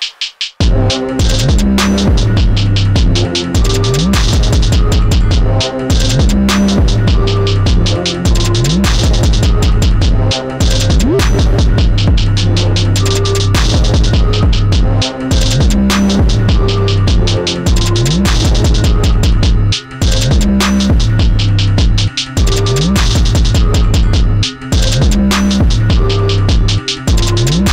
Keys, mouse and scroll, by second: 2.7 click, 3.2 shift+scroll up 1, 3.2 shift+middle click, 6.8 click, 10.6 scroll up 1, 10.9 shift+middle click, 14.1 click, 19.9 click, 24.6 middle click, 27.1-27.7 scroll down 1.